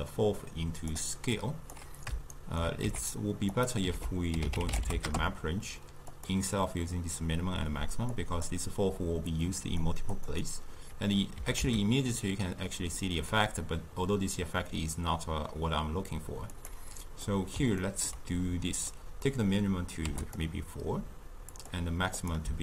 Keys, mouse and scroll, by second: 2.3 shift+right click, 2.9 g, 3.9 ctrl+a, 8.1 click, 9.3-10.2 drag, 11.4 g, 17.3-18.8 middle drag, 18.8-20.4 drag, 21.5 click.